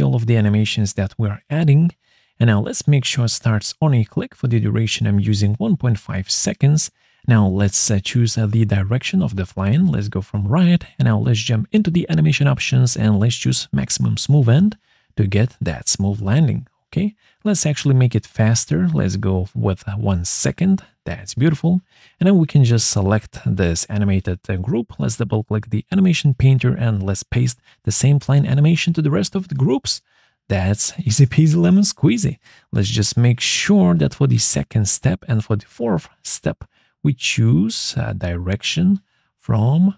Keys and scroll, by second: 4.8-6.0 typing, 19.0 1, 20.4 Return.